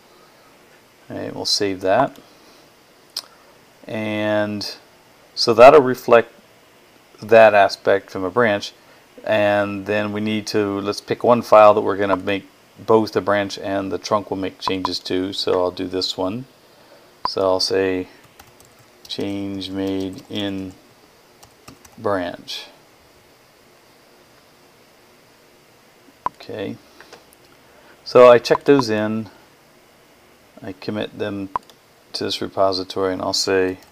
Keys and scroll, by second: 0.0-0.1 typing, 17.8-22.2 typing, 33.2-33.9 typing.